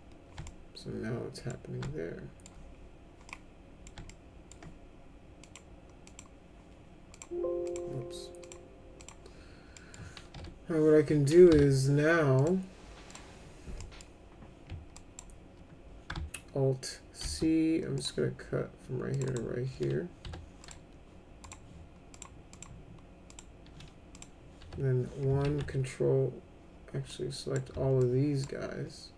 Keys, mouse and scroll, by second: 0.4-1.5 alt+middle drag, 1.8 alt+middle click, 3.3 middle click, 4.1 alt+middle click, 5.4 click, 6.1 click, 7.1 click, 7.7 click, 8.4 click, 9.0 click, 9.8 middle click, 10.1-11.5 typing, 12.4 click, 13.1 click, 13.8 middle click, 14.9 ctrl+drag, 17.2 alt+c, 18.0 click, 19.1 click, 19.3 right click, 20.2 1, 20.6 click, 21.4 right click, 22.1 click, 22.5 click, 23.3 click, 24.1 click, 24.6 1, 25.4 ctrl+a, 27.1-27.5 drag, 28.0 ctrl+click.